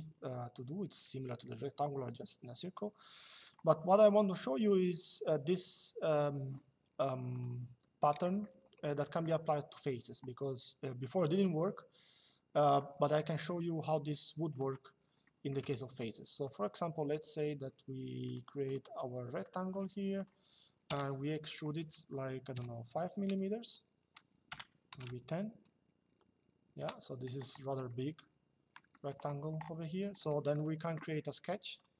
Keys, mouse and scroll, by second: 3.2 click, 7.0 click, 7.9 middle click, 13.6 click, 15.3 click, 17.3 Escape, 18.0 click, 19.5 Escape, 19.9 click, 20.6 e, 22.3 KP_5, 24.2 BackSpace, 26.4 Return, 27.6 middle click, 29.9 middle click, 30.3 click, 31.4 click.